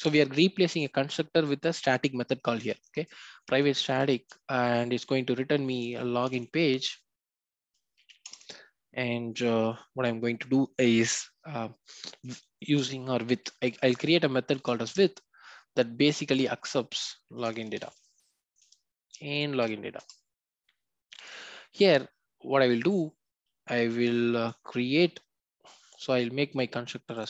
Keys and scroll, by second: 8.2 Return, 18.6 Return.